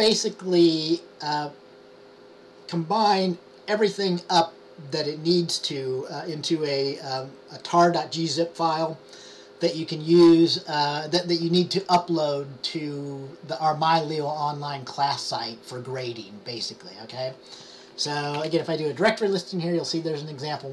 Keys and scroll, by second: 18.5 typing.